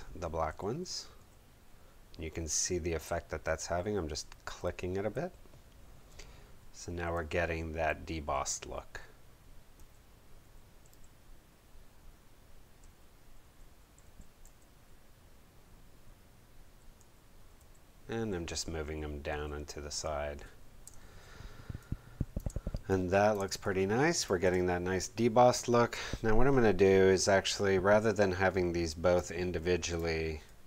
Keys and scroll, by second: 0.5 Right, 2.9 Right, 3.6 Right, 4.6 Down, 6.6 Right, 7.1 Down, 8.3 Up, 9.7 Down, 10.9 Up, 12.8 Right, 14.0 Up, 14.4 Down, 16.6 Left, 16.9 Right, 17.5 Right, 18.1 Down, 18.4 Up, 18.8 Left, 19.3 Right, 20.8 space.